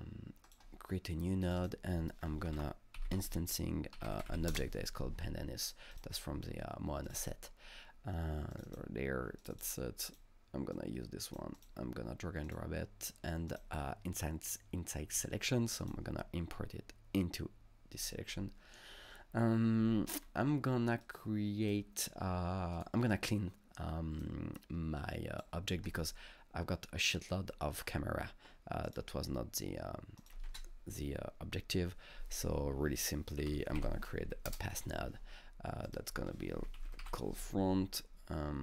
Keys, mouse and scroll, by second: 0.5 click, 1.5 click, 1.6 double click, 2.3-4.8 typing, 5.9 click, 7.1 click, 7.2 double click, 8.5 click, 8.7 double click, 9.4 click, 9.5 double click, 10.1 click, 10.7 click, 10.8 click, 11.6 click, 12.5-13.5 drag, 13.5 click, 15.8 click, 20.2 click, 20.2-21.0 scroll down 1, 21.0-22.7 drag, 23.1-27.8 drag, 28.9-30.2 drag, 30.2 click, 30.5 ctrl+space, 30.6 click, 33.2-34.3 typing, 33.5 click, 34.5 Return, 35.9 click, 36.3 Up, 36.3-37.6 typing, 36.9 click.